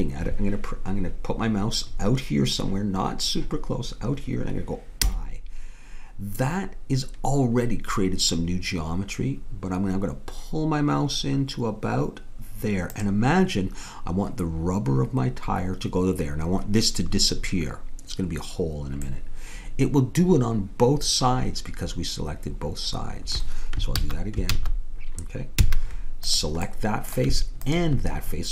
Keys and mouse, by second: 5.1 i, 19.1-20.9 middle drag, 24.0 ctrl+z, 24.5 ctrl+z, 25.6 a, 26.3 click, 27.0-28.1 middle drag, 28.1-28.5 drag.